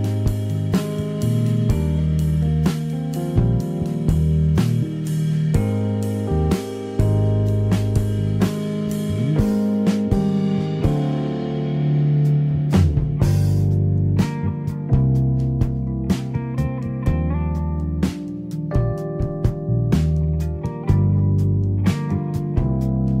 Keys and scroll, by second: 1.0 Escape, 5.4 Escape.